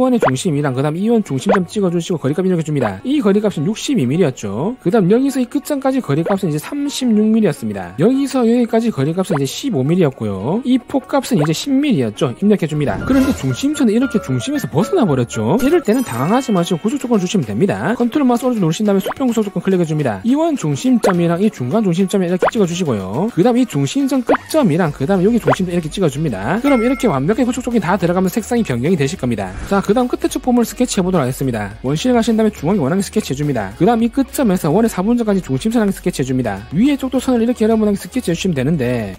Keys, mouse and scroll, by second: 0.0 d, 1.0 click, 2.1 click, 2.8 click, 4.1 2, 5.0 click, 5.8 click, 6.2 click, 6.6 3, 8.3 click, 8.9 click, 9.3 click, 9.5-10.5 typing, 10.7 right click, 11.0 right click, 11.4 right click, 11.8 1, 19.0 ctrl+right click, 20.1 click, 21.6 click, 23.0 click, 25.0 click, 26.4 click, 32.1 2, 32.6 click, 33.2 click, 34.9 click, 36.2 click, 37.7 click, 39.1 click.